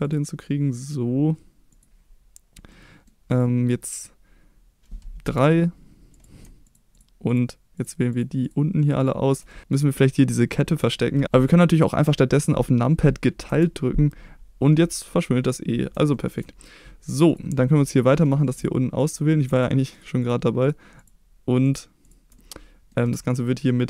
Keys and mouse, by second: 1.7 click, 2.7 middle click, 5.2 3, 6.6 click, 8.1 click, 8.4 shift+click, 9.0 shift+click, 9.5 middle click, 9.7 middle click, 13.4 KP_Divide, 14.7 middle click, 16.1 shift+middle click, 17.3 click, 17.7-18.1 middle drag, 18.5 shift+click, 19.0 shift+click, 19.9-20.3 shift+drag, 21.6 shift+click, 22.3-22.9 middle drag.